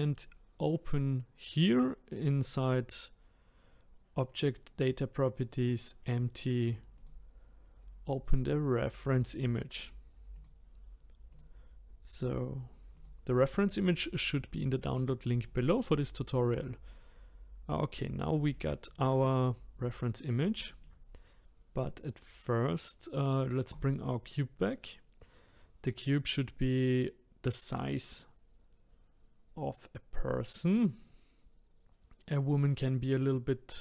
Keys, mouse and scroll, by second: 6.9-10.1 drag, 15.4-17.6 shift+middle drag, 17.6-18.5 scroll up 2, 18.5-23.7 shift+middle drag, 23.7-26.7 drag, 30.7-32.5 drag.